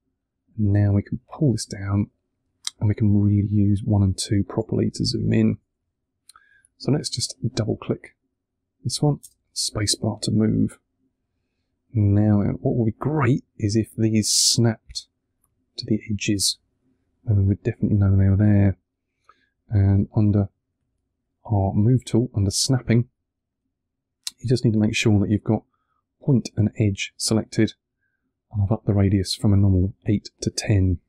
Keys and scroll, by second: 3.4 1, 9.1 space.